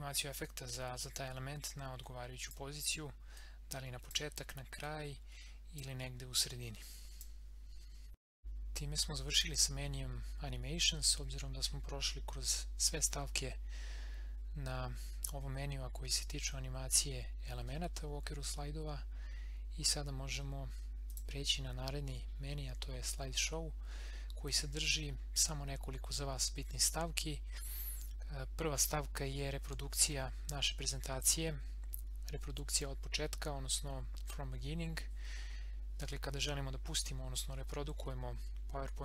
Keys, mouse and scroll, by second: 8.4 click, 21.0 click.